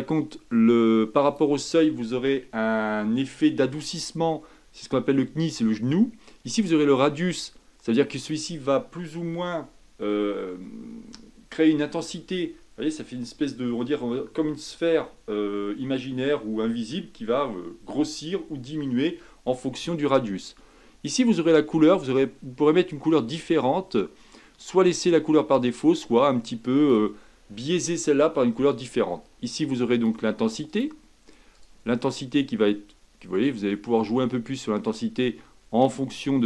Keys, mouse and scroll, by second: 31.5 click, 32.3-36.4 drag.